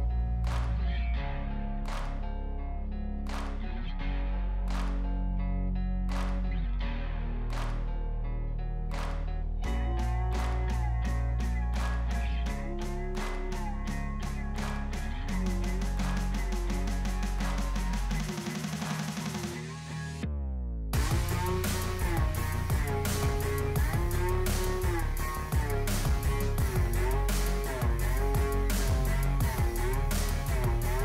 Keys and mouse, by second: 6.8 right click, 8.0 right click, 9.2 right click, 10.1 right click, 10.2 right click, 10.8 right click, 11.7 right click, 13.7 right click, 19.3 right click, 19.6 right click, 19.7 right click, 25.9 right click.